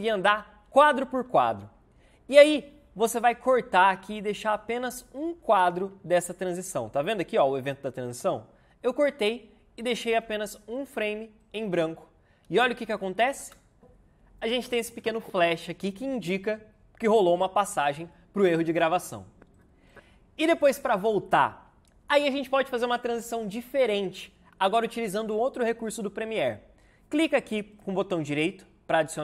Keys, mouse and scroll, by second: 0.1 Left, 1.0 Right, 3.9 c, 4.6 v, 13.3 space.